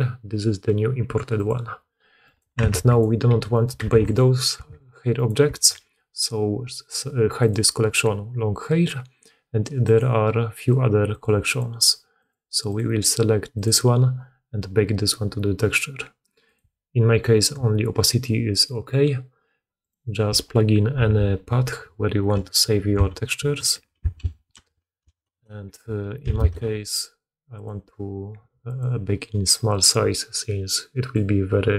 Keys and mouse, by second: 2.1 click, 2.5 Tab, 2.8 click, 3.1 middle click, 3.1 g, 3.8 alt+a, 4.5 alt+a, 5.1 click, 5.5 alt+a, 7.2-8.4 drag, 9.7 click, 11.0 click, 12.0 click, 12.5 click, 13.5 click, 16.5 click, 16.7-19.6 middle drag.